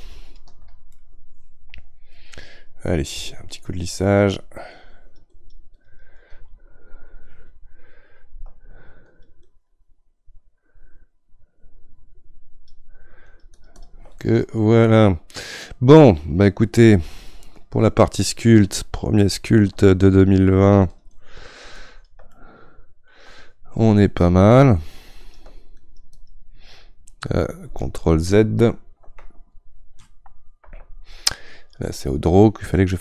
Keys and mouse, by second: 0.9-3.5 middle drag, 3.5-14.2 shift+drag, 14.2-20.2 middle drag, 20.2-22.3 shift+drag, 22.3-24.0 middle drag, 24.0-29.0 shift+drag, 29.0 ctrl+z, 30.6 ctrl+z, 32.0-33.0 drag.